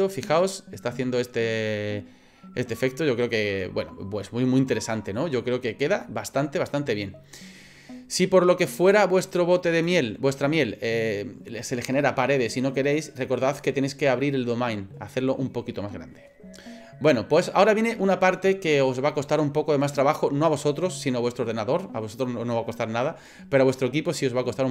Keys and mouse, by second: 4.3 middle click, 6.0 middle click, 8.7 click, 9.3 click, 9.7 click.